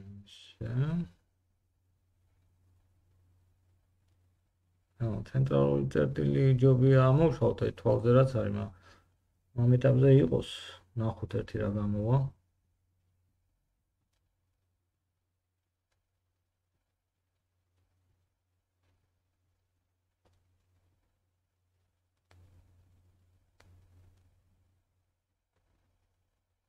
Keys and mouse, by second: 2.2 click, 2.2 middle click, 2.2 right click, 2.4-5.5 drag, 2.4 g, 6.3 g, 9.2 middle click, 16.7 middle drag, 18.1 g, 21.1 g, 26.2 middle click.